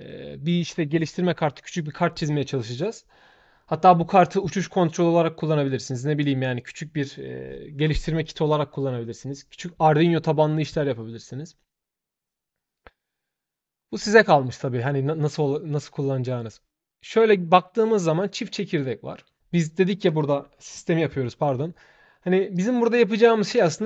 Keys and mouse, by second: 14.6 shift+middle click, 19.8 shift+click, 23.4 shift+click.